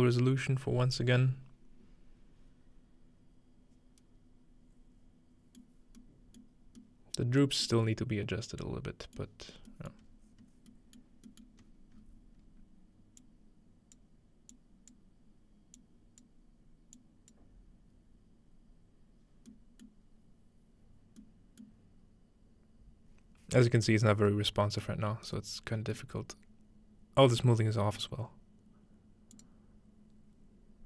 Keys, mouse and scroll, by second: 5.6-6.0 middle drag, 5.8 scroll down 1, 6.0-6.4 scroll up 1, 6.8-7.6 middle drag, 9.2-9.7 middle drag, 10.0-13.1 scroll up 4, 13.2-14.9 drag, 15.8 click, 17.0 click, 19.9-21.2 middle drag, 21.6-23.5 middle drag, 25.0 middle click, 25.0-25.9 scroll up 1, 25.9-27.4 scroll up 1, 28.0-29.5 middle drag, 29.3-30.8 drag.